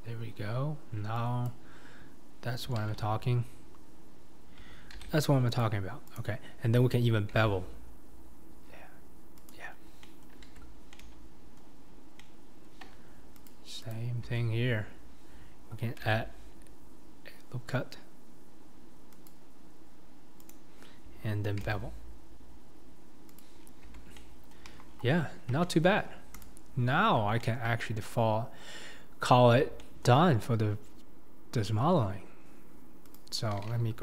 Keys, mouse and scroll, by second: 2.8 ctrl+z, 5.0 ctrl+r, 7.4 ctrl+b, 10.1 middle click, 10.6 Tab, 10.7 scroll down 2, 10.9-11.8 middle drag, 11.8-12.2 scroll up 4, 12.2-13.5 middle drag, 13.5 click, 13.9 click, 14.4 Tab, 14.8-16.0 scroll up 2, 16.0 ctrl+r, 24.0 Tab, 24.1-24.6 middle drag, 24.6 KP_1, 24.9-25.6 scroll down 8, 25.6-26.0 shift+middle drag, 26.0-26.4 scroll down 4, 26.4-26.9 drag, 26.9-27.4 scroll down 5, 27.4-27.7 shift+middle drag, 27.7-28.2 scroll up 5, 28.2-28.9 scroll down 4, 28.9-29.4 scroll up 3, 29.4-29.8 scroll down 4, 29.8-30.2 shift+middle drag, 30.2-30.8 scroll up 2, 30.8-31.5 scroll up 1, 31.5-33.1 scroll down 2, 33.1 click.